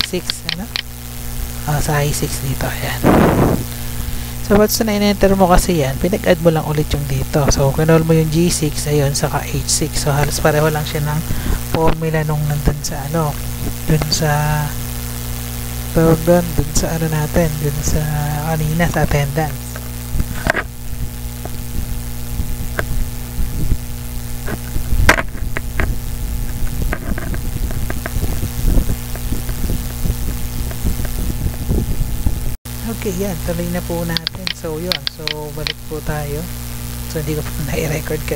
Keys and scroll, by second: 0.6 Tab, 1.8 Tab, 3.6 F2, 4.1 ctrl+v, 4.7 BackSpace.